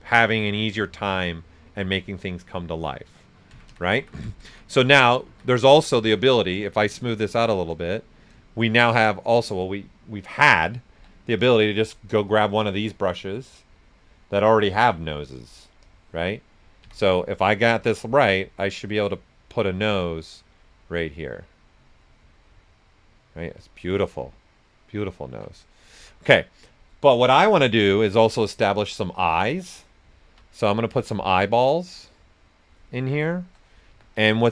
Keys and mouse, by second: 3.5 ctrl+z, 6.5-8.5 shift+drag, 8.5 shift+click, 10.9 b, 12.6-15.8 drag, 16.8 x, 17.5-20.0 drag, 20.0 ctrl+z, 20.5-22.6 drag, 22.6-25.3 right drag, 25.3 ctrl+z, 25.6-27.1 right drag, 27.1 b, 28.8 click, 30.1 ctrl+right click, 30.5 x, 31.3-32.9 drag, 32.9 right click, 33.9 w, 34.3 ctrl+right click.